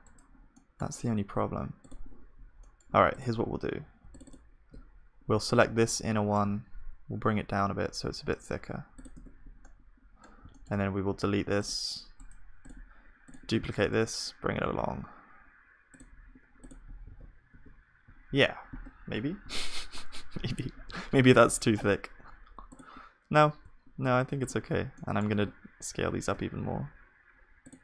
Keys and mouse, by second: 0.5-2.6 drag, 5.9 click, 6.6 s, 9.2 Tab, 9.4-13.7 middle drag, 13.7 shift+d, 16.7 click, 16.7 shift+d, 17.0 click, 17.2 ctrl+s, 17.5 KP_1, 18.3 click, 19.1 middle click, 19.5-20.8 middle drag, 20.8-27.7 middle drag, 24.9-27.7 drag, 25.8 s.